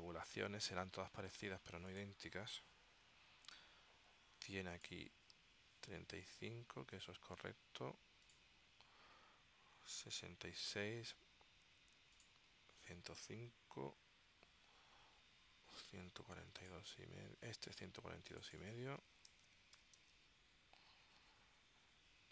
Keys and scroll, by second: 19.0-20.7 typing, 21.3 Tab.